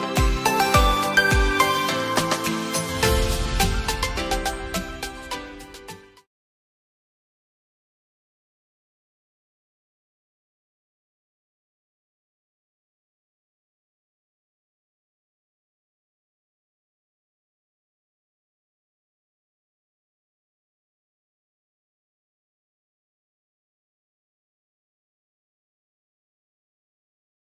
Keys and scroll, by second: 17.4 ctrl+g.